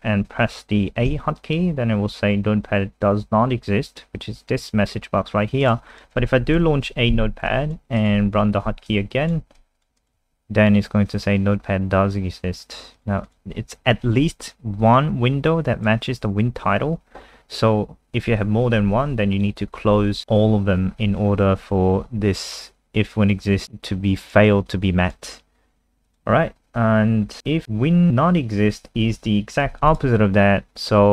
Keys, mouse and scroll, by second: 1.1 a, 5.6 click, 5.9 click, 6.6 super+n, 7.5 alt+click, 8.0 click, 9.6 alt+click, 10.0 click, 10.2 a, 12.9 click, 13.3 click, 13.9 alt+F4, 14.8 click, 23.6 super+3, 24.2 click, 26.7-27.2 scroll down 1, 27.3-28.1 scroll down 2, 27.4 click, 28.7 click, 29.7 ctrl+c, 29.9 click, 30.2 click.